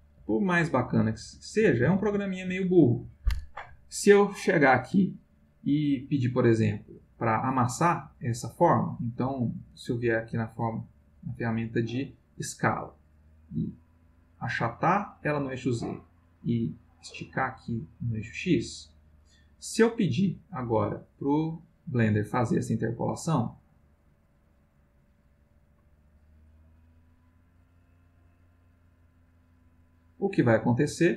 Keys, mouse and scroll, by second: 1.2 ctrl+z, 2.0 ctrl+z, 4.1-4.8 drag, 10.9 click, 13.4-15.5 drag, 16.0-19.0 drag, 20.1-21.5 drag, 22.6 click, 23.4 click, 24.9 click, 26.2 click, 27.2 click, 28.4 click, 29.1 click, 29.8 click.